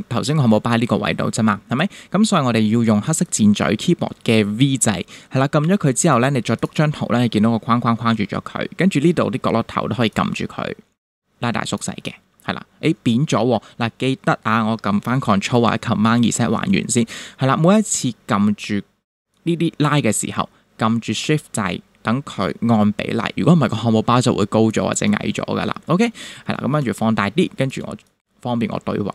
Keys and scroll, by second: 16.1 super+z, 25.9 shift+=, 26.8 space.